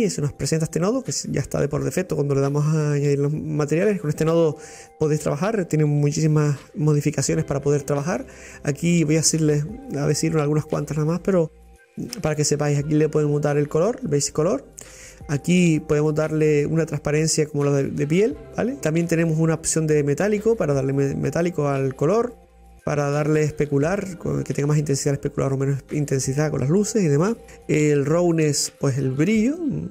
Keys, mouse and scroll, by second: 29.4-29.9 drag.